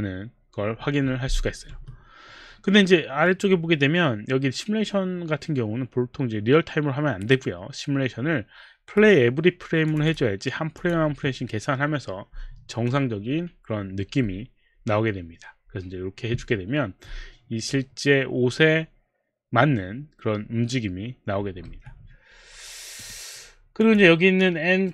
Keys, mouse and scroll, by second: 1.7 Escape, 3.2 right click, 9.9 click, 10.1 click, 10.8 click, 11.1 click, 11.6 click, 21.7 Escape, 23.0 click, 23.8 click.